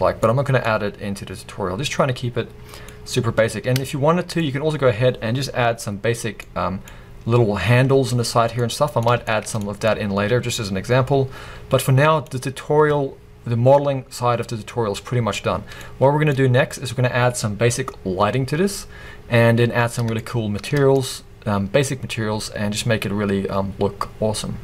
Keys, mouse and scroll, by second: 4.4 scroll up 1, 8.3 scroll down 1, 12.4-13.7 scroll down 2, 15.6 scroll down 2, 16.3-20.1 scroll up 1, 20.1 shift+scroll up 1.